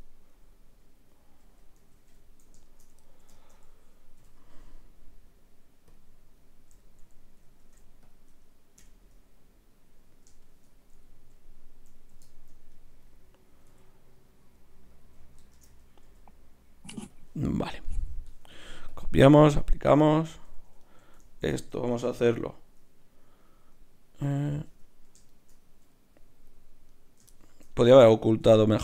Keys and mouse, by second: 1.4 KP_7, 4.2 w, 7.6 ctrl+Tab, 8.8 KP_Divide, 12.7 right click, 13.1-14.9 drag, 13.7 g, 15.5 shift+Tab, 16.0 g, 18.3 Tab, 18.9 click, 19.8 Tab, 20.3-23.0 drag, 20.3 right click, 24.7 Tab, 25.7 KP_Divide, 26.2 click, 28.4 Tab.